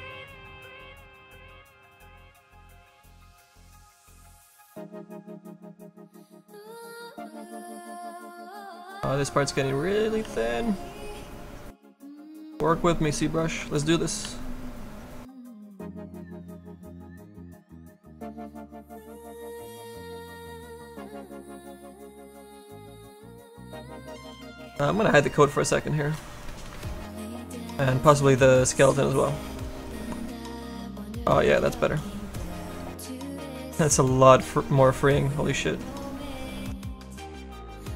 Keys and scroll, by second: 10.2 s, 13.6 s, 14.2 s, 23.5 s, 32.9 s.